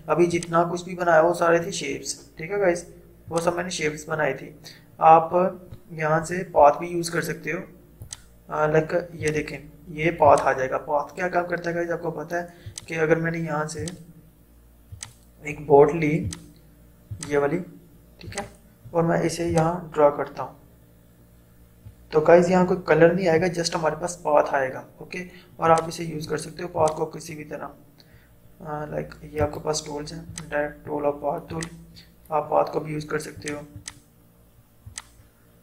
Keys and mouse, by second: 0.4-3.3 drag, 6.3 Delete, 8.1 click, 12.7-25.7 drag, 26.9-29.4 drag, 29.4 right click, 30.3-33.4 drag.